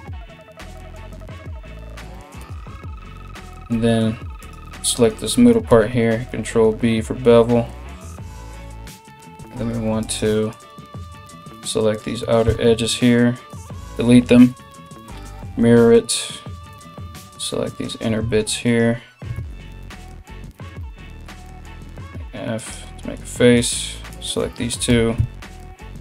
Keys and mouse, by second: 4.0 alt+right click, 5.3 ctrl+b, 9.0 2, 9.6 right click, 10.1 right click, 11.2 right click, 11.5 right click, 12.1 x, 14.9 alt+x, 16.3 right click, 16.4-22.0 shift+middle drag, 17.3 shift+right click, 18.1 ctrl+shift+z, 18.3 shift+right click, 19.1 ctrl+z, 19.4 shift+right click, 20.1 f, 22.2 right click, 23.2 right click, 23.7 shift+right click, 24.5 g.